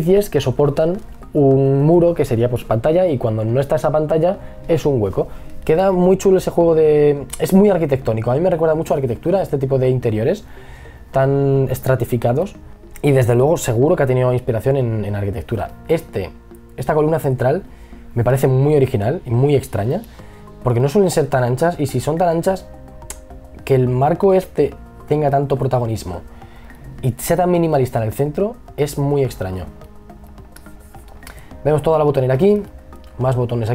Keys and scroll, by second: 8.1 e, 9.3 b, 11.2 b, 30.0 e, 30.9 b.